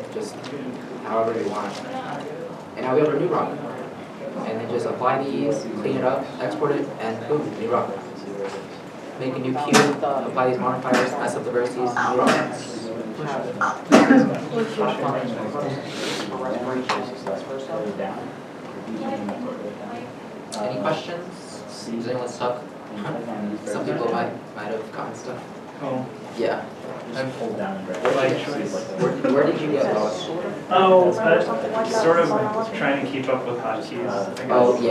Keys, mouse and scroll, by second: 0.5 middle click, 1.2 g, 4.0 middle click, 8.1 middle click, 12.7 shift+middle click, 14.8 middle click.